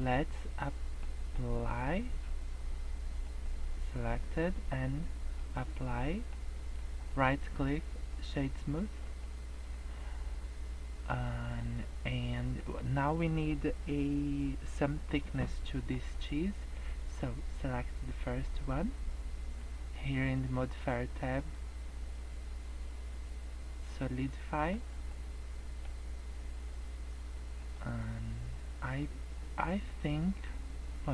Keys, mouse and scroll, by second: 0.7 middle click, 3.2 click, 5.3 click, 6.1 middle click, 6.4-7.0 scroll up 2, 7.1 right click, 8.7 middle click, 9.1 scroll down 4, 9.3 middle click, 9.6 scroll up 3, 9.9 middle click, 11.4 middle click, 12.3 middle click, 15.6 middle click, 16.9 click, 21.3 click, 24.5 middle click, 24.7 scroll up 2, 25.1 middle click, 27.6 click, 28.7 scroll down 3, 28.9 middle click.